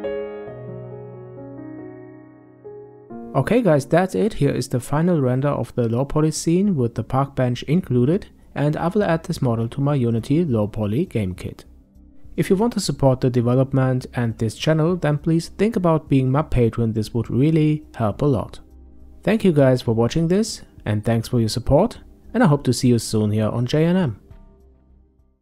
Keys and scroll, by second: 1.7 g, 3.9 g.